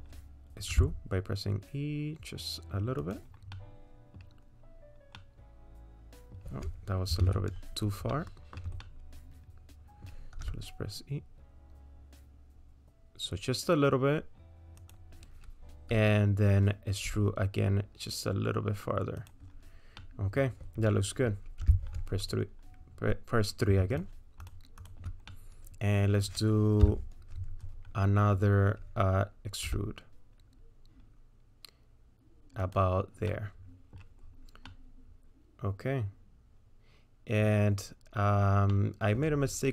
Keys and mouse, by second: 0.7 e, 3.5 middle click, 3.9 middle click, 5.2-6.4 drag, 7.2 ctrl+z, 8.1 shift+click, 9.0-10.1 drag, 10.4 e, 17.1 e, 20.0 middle click, 20.9 middle click, 22.0 3, 22.3 click, 23.9 shift+click, 25.3 click, 26.8 KP_3, 29.7 e, 33.3 middle click, 33.7 click, 34.7-37.3 middle drag, 38.7 middle click.